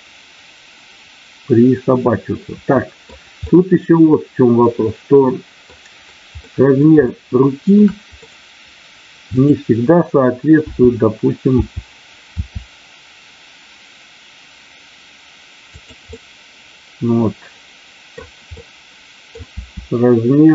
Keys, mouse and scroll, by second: 3.4-5.8 middle drag, 3.4-4.0 scroll up 1, 6.5 middle click, 7.0 shift+middle click, 7.0-7.8 scroll up 1, 8.1 middle click, 8.1 scroll up 1, 9.2 click, 11.6 t, 12.2 r, 15.6 click, 16.1-18.1 middle drag, 18.5 middle click, 19.5 r.